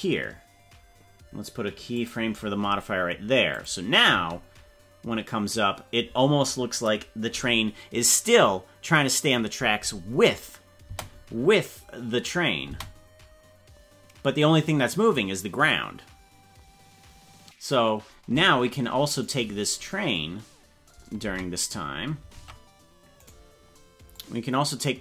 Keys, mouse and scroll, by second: 1.9 click, 3.5 click, 4.1 space, 6.7 scroll up 2, 10.9 space, 12.7 space, 19.3 right click, 21.3 space, 22.3 ctrl+Tab, 23.2 right click, 24.1-25.0 drag.